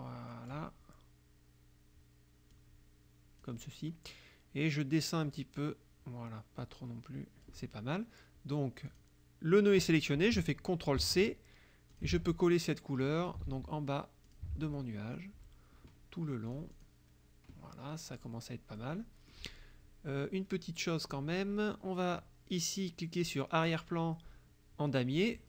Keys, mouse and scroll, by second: 2.6-3.7 drag, 5.3 click, 6.7-7.7 drag, 8.9 click, 11.0 ctrl+c, 12.0 ctrl+click, 12.2 ctrl+v, 13.3 ctrl+click, 13.5 ctrl+v, 14.3 ctrl+click, 14.6 ctrl+v, 16.6 click, 16.9 click, 18.2 click, 18.8 click, 21.0 click, 25.2 click.